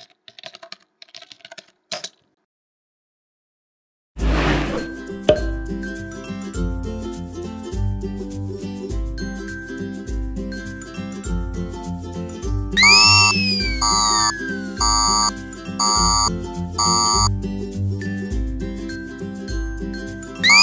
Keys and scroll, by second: 0.0-2.6 typing, 7.4 space.